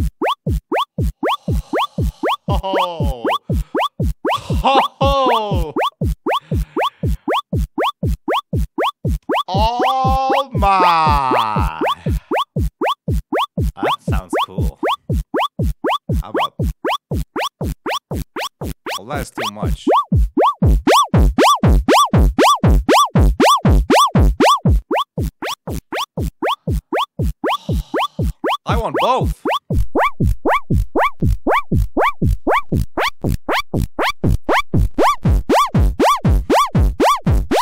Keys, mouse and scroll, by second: 16.2 click, 29.7 click, 32.3-33.6 drag, 34.1 right click, 34.5-36.5 drag, 37.1-37.6 drag.